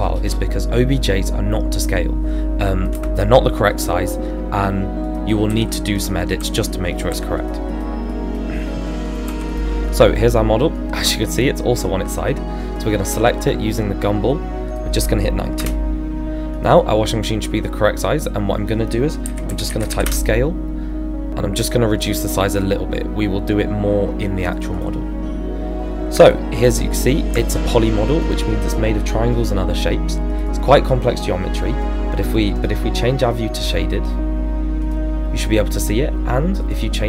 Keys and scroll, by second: 2.9 space, 15.6 Return, 19.2-19.9 typing, 20.0 Return.